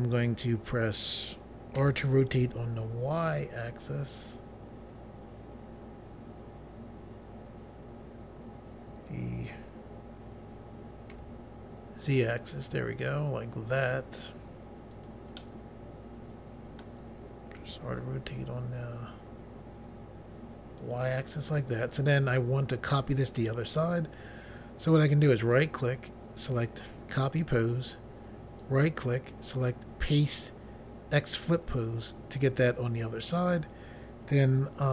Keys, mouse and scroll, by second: 1.7 r, 2.3 y, 11.1 z, 14.9 click, 15.0 click, 15.4 middle click, 17.6 r, 18.3 y, 20.8 click, 20.9 click, 25.3 right click, 27.1 click, 27.3 click, 28.6 right click, 31.7 click, 31.9 click.